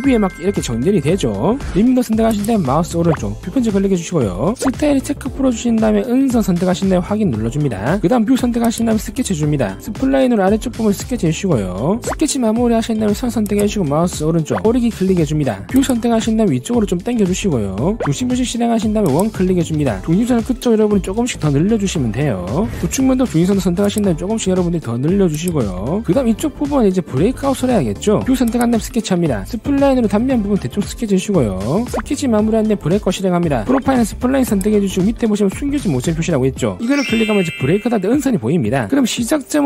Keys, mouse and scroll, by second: 0.5 click, 1.1 click, 1.3 scroll up 1, 2.4 click, 3.2 right click, 6.2 click, 7.0 click, 7.9 click, 9.0 click, 9.2-9.7 scroll up 3, 10.0 click, 10.6 click, 11.0 click, 11.5 click, 12.0 click, 12.8 click, 14.1 click, 14.6 right click, 16.0 click, 16.9 scroll up 1, 18.7 click, 19.6 click, 20.8 click, 21.8 click, 22.6 click, 22.6 right click, 24.2 click, 24.9 scroll down 1, 25.6 click, 26.6 scroll down 1, 26.9 middle click, 27.8 scroll up 1, 29.2 click, 30.0 click, 30.4 click, 30.8 click, 31.1 click, 31.4 click, 31.9 click, 32.4 click, 32.8 scroll down 1, 33.1 scroll up 1, 35.3 click, 37.7 click, 39.0 click.